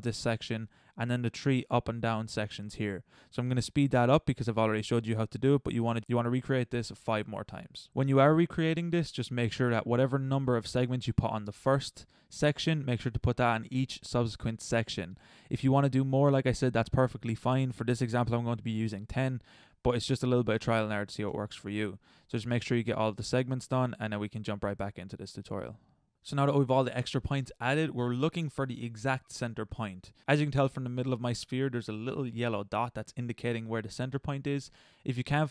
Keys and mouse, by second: 5.4 ctrl+r, 5.9 ctrl+z, 6.1 ctrl+r, 7.8 a, 17.4 a, 17.7 ctrl+r, 19.6 a, 19.8 ctrl+r, 22.5 a, 22.7 ctrl+r, 24.8 a, 28.1-30.2 middle drag.